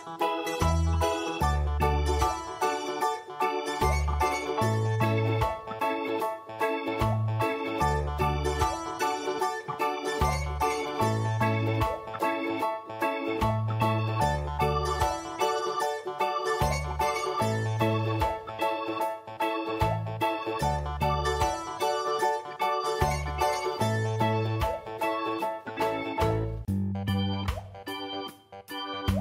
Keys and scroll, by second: 2.5 typing, 18.6 ctrl+space, 23.2 ctrl+alt+v.